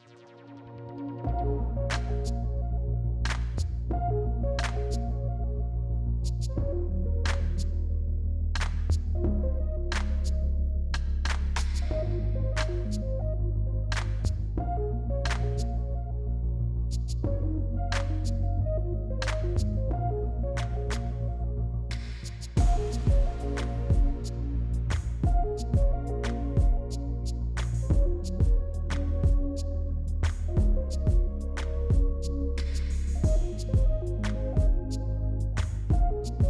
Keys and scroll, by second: 4.9 f, 5.3 F3, 6.0 F3, 11.4 f, 11.6 F4, 13.0 b, 15.1 F3, 17.3 ctrl+z, 18.1 f, 19.9 f, 21.4 f, 21.5 F3, 24.9 f, 26.2 F3, 27.6 5, 29.1 p, 30.8 s, 31.3 s.